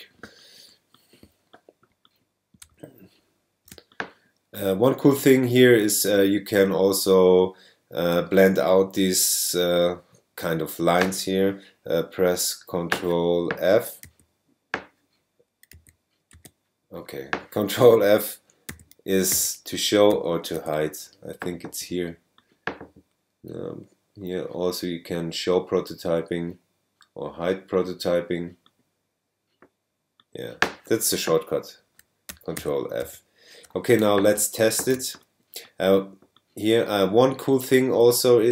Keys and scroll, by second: 3.7 super+space, 4.7 space, 14.0 ctrl+f, 15.7 ctrl+f.